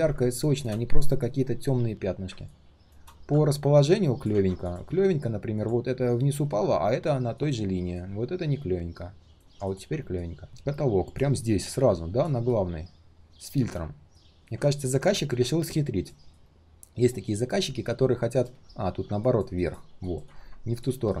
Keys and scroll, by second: 4.3 ctrl+z.